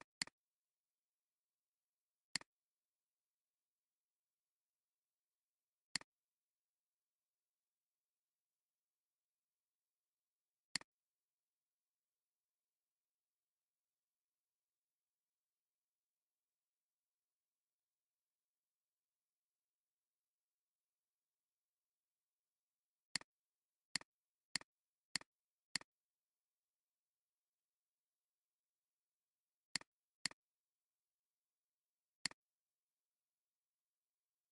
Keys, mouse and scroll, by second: 0.2 double click, 0.5 double click, 10.6 click, 12.0 scroll down 1, 23.9 click, 24.5 click, 25.1 click, 26.5 click, 26.9 click, 27.1 click, 27.3 click, 29.0 alt+scroll down 1, 29.6 space, 31.3 alt+scroll down 1, 32.2 alt+shift+click.